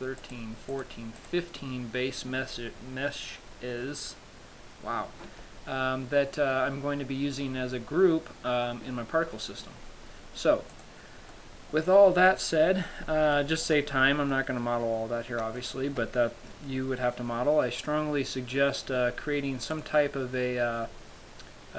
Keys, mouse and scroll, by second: 0.5 right click, 1.0 right click, 1.5 right click, 5.5 a, 11.0 click, 11.6 middle click, 12.6 middle click, 13.2-15.2 scroll up 4, 13.7 shift+middle click, 14.6 middle click, 15.9 shift+middle click, 20.1 click.